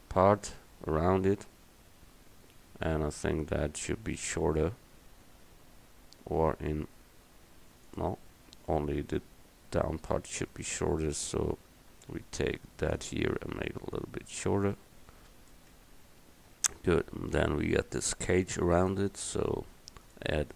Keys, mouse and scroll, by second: 4.7 Tab, 5.4 a, 6.4 s, 8.5 Tab, 9.7 Tab, 10.6-12.5 drag, 11.6 a, 12.5 c, 13.7-14.7 drag, 16.0 Tab.